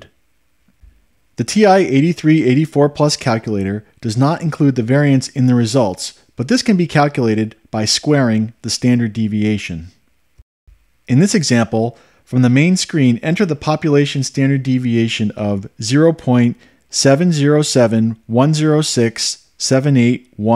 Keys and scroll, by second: 17.1-20.5 typing.